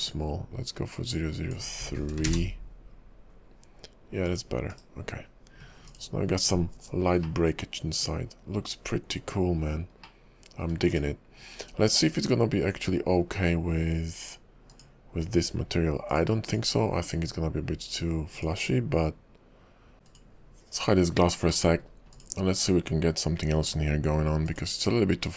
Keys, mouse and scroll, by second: 4.7 /, 5.9 click, 7.4 middle click, 10.2 middle click, 11.0 click, 12.1-12.7 scroll down 3, 14.7 shift+click, 16.1 click, 16.5 click, 16.7 shift+click, 18.4 click, 20.1 click, 21.2-21.5 scroll up 2, 21.7 middle click, 22.2 click, 24.5 click.